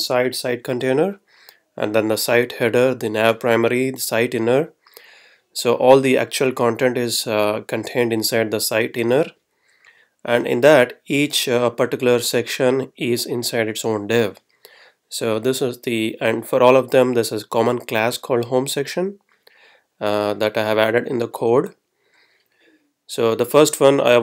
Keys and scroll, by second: 0.0 Right, 0.9 Down, 2.3 Down, 3.5 Down, 9.0 Right.